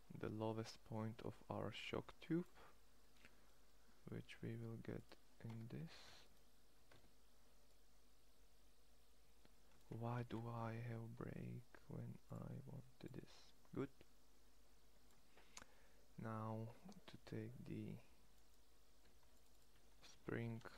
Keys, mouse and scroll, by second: 2.6 middle click, 5.3 Tab, 6.7 Tab, 9.9 ctrl+z, 15.0-18.2 middle drag, 18.2-20.7 drag.